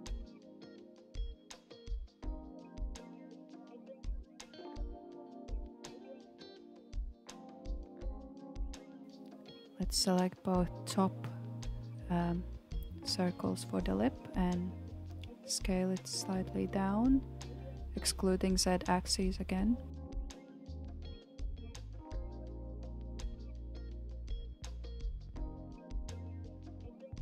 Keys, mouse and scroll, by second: 1.9 ctrl+b, 7.7-8.7 scroll up 3, 8.7 click, 9.0 KP_1, 9.3 alt+z, 9.8 click, 12.9 alt+z, 14.1 s, 21.9 alt+z, 22.3-22.7 scroll down 3, 22.7 alt+z, 23.4-23.8 middle drag, 23.8 click, 24.4-24.8 scroll down 3, 24.8-25.6 middle drag, 25.6 Tab, 26.2-26.7 scroll down 2, 26.7-27.2 shift+middle drag.